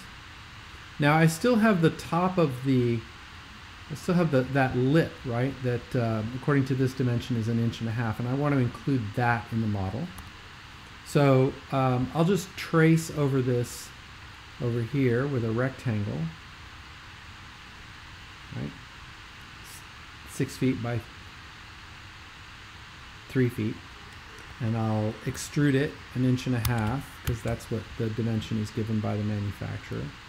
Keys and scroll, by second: 10.2 x, 25.3 super+e, 26.4-27.7 typing.